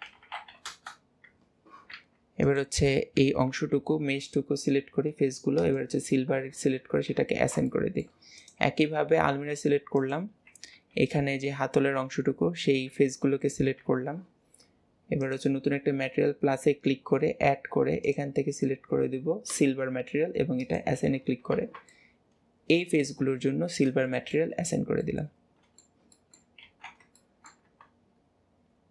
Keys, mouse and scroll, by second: 2.5 click, 5.6-7.2 drag, 7.2 Tab, 7.7 middle click, 8.4 click, 10.0 click, 15.3-21.6 drag, 22.0-23.5 middle drag, 24.1-24.7 middle drag, 24.7 scroll down 2, 25.1-26.7 middle drag, 26.7 ctrl+s, 27.2-28.9 shift+middle drag.